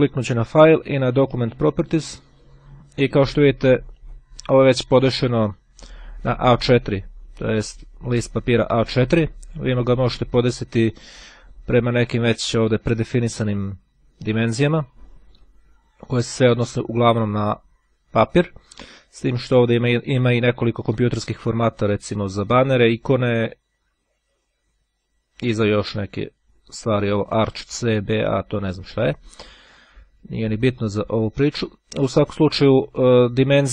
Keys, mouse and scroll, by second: 1.7 click, 4.0 click, 10.5-11.3 scroll down 2, 13.5-17.1 scroll down 2, 19.0-19.5 scroll up 2, 19.5-20.1 scroll up 2, 20.2 scroll up 2, 22.3-24.3 scroll down 2, 26.9-27.3 scroll up 1, 27.7-29.0 scroll up 1, 30.0-31.1 drag, 33.5-33.7 drag.